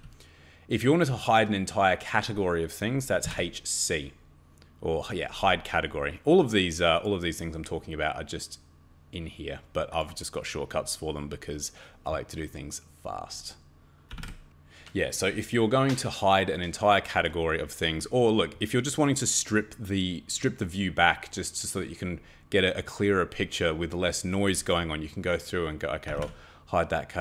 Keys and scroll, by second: 0.0-0.3 typing, 2.9-3.7 typing, 13.9-14.7 typing, 25.8-26.7 typing.